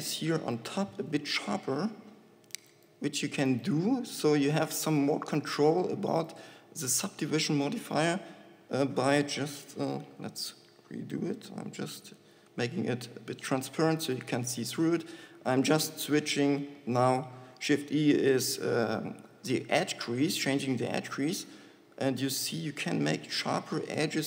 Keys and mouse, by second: 9.9 ctrl+z, 16.0 shift+e.